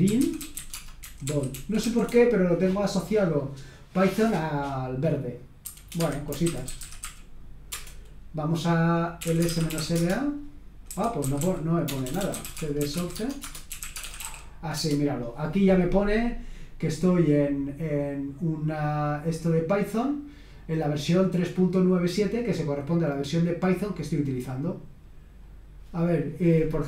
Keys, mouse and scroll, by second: 0.0-2.3 typing, 5.6-15.3 typing, 5.9 Escape, 20.5 click, 23.0-23.9 scroll down 1, 23.9-24.8 scroll down 1, 24.8-25.4 scroll down 1, 25.4-26.2 scroll down 1, 26.2 click.